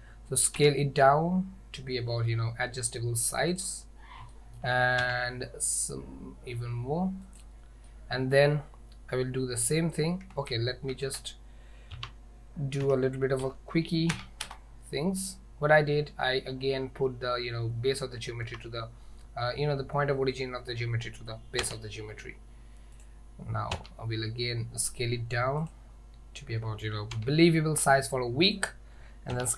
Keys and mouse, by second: 0.6 s, 4.4 shift+middle drag, 5.1 s, 8.0 middle drag, 8.1 click, 8.1 right click, 10.4 ctrl+z, 10.9 ctrl+z, 12.0 Tab, 12.9 g, 18.5 Tab, 21.7 s, 23.8 s, 27.2 s, 29.4 s.